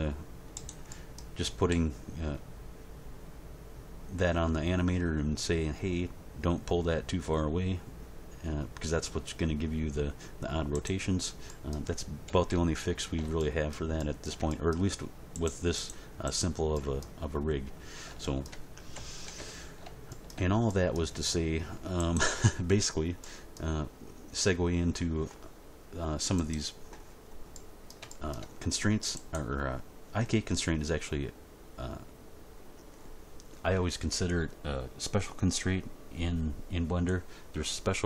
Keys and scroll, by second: 1.7 g, 12.2 End, 12.5 Page_Down, 18.9 End, 19.3 Page_Down.